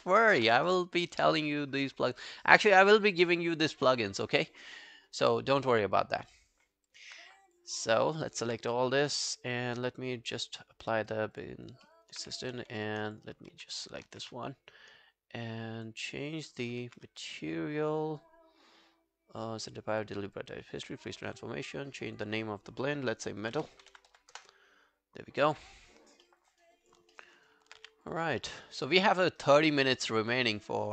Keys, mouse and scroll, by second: 0.1 alt+right click, 5.9 scroll down 2, 6.4 alt+middle click, 6.7 alt+scroll down 1, 6.9 alt+click, 7.8 alt+middle click, 8.0 alt+right click, 8.3 alt+click, 8.8 right click, 11.6 scroll up 2, 11.9 alt+middle click, 12.1 alt+right click, 13.1 ctrl+click, 14.1 ctrl+a, 16.7 ctrl+a, 16.9 ctrl+a, 19.7 double click, 20.0 double click, 23.2-24.6 typing, 26.3 alt+middle click, 26.5 alt+right click, 26.8 alt+click, 27.2 alt+middle click, 27.4 alt+right click, 27.8 q, 28.4 alt+middle click, 28.6 alt+right click, 28.8 alt+click, 29.2 alt+middle click, 29.4 alt+right click, 29.7 alt+click, 30.5 alt+middle click, 30.7 alt+right click.